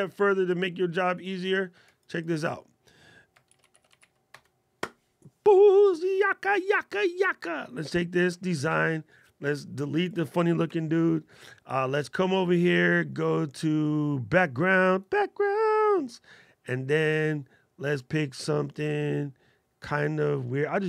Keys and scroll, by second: 3.2 shift+c.